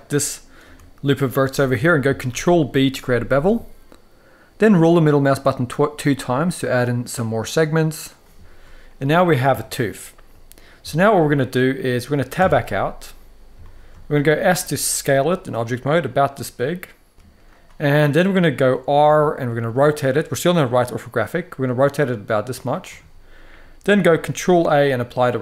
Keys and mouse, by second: 0.3 r, 0.9 click, 2.0 ctrl+b, 9.3 shift+middle click, 10.6 shift+middle click, 12.1 Tab, 13.4 shift+middle drag, 14.1 s, 17.0 click, 17.1 s, 18.8 r, 24.4 ctrl+a.